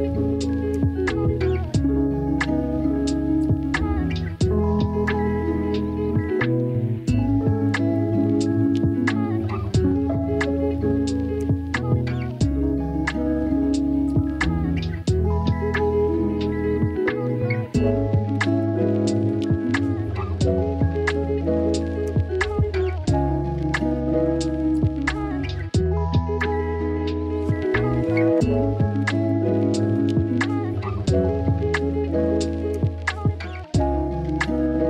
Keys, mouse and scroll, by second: 5.5 click, 6.1 click, 6.7 Tab, 6.9-8.4 drag, 8.9 click, 9.2 click, 10.3 click, 10.6 click, 10.8 Tab, 13.4 click, 13.8 shift+click, 14.1-15.1 shift+drag, 15.3 shift+click, 15.6-16.7 shift+drag, 17.0 shift+click, 22.2 p, 25.4 click, 26.9 click, 29.1 alt+z, 30.2 click, 33.1 click, 34.4 x.